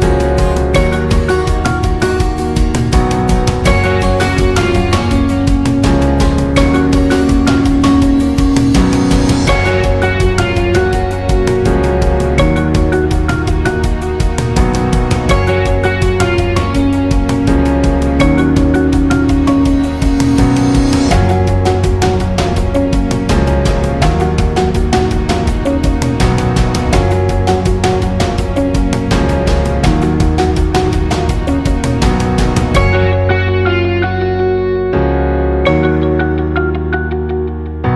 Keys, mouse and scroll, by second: 0.8 click, 1.0 right click, 2.4-6.7 drag, 7.5 alt+scroll down 1, 7.7 space, 7.9 click, 8.2 space, 9.0-9.3 alt+scroll up 1, 9.3 space, 9.4 click, 9.8 space, 12.4 space, 12.6 alt+scroll down 1, 12.8 space, 13.0-16.4 drag, 16.6 right click, 17.5 click, 18.1 alt+scroll up 1, 19.2-20.8 alt+drag, 20.8 alt+scroll down 1, 21.8 alt+scroll up 1, 22.0 space, 22.2 click, 22.5 space, 22.9 space, 23.6 alt+click, 24.6 space, 24.7 click, 25.1 space, 25.5 alt+scroll up 1, 26.2 alt+scroll up 1, 27.0-29.8 alt+drag, 29.8 alt+click, 30.9 alt+scroll down 1, 31.2 space, 31.4 click, 31.7 space, 33.6 click, 35.2 alt+scroll down 1, 35.4 space, 35.6 click, 36.3 alt+scroll up 1, 36.4 space, 36.6 click, 36.9 space.